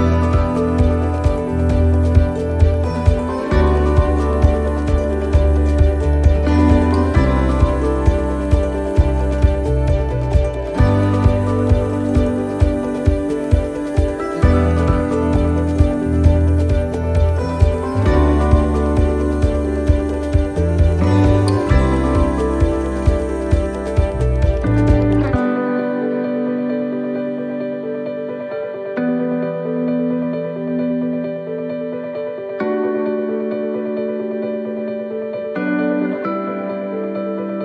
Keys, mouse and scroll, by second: 4.8 click, 4.8 right click, 6.0 l, 7.1 shift+d, 8.8 click, 12.4 click, 12.5 middle click, 13.5 shift+middle click, 16.4 right click, 17.9 right click, 18.1 shift+right click, 18.2 shift+right click, 19.5 s, 24.2 right click, 24.2 middle click, 25.8 shift+right click, 27.4 s, 35.8 right click, 35.8 click.